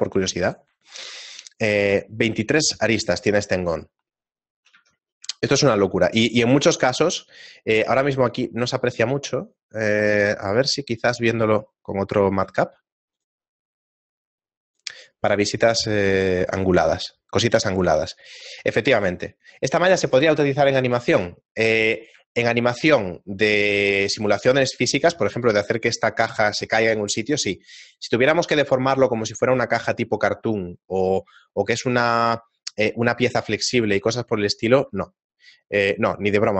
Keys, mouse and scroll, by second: 1.0 ctrl+Tab, 1.0 right click, 3.9 shift+middle click, 5.5 a, 6.2 shift+middle click, 13.7 middle click, 13.7 click, 15.0 middle click, 22.3 shift+middle click, 23.4-23.9 scroll down 3, 23.9 middle click, 24.6 shift+middle click.